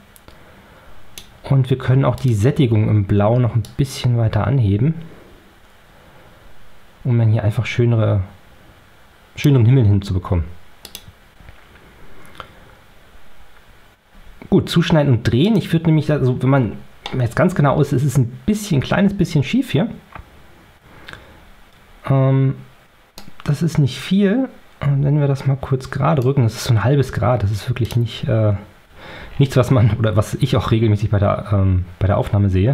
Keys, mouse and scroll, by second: 15.3 click, 17.0 middle click, 17.2 click, 23.1-26.3 right drag, 27.8 click, 29.2-29.9 ctrl+scroll down 4, 30.5 ctrl+scroll up 2, 31.3 ctrl+scroll up 2.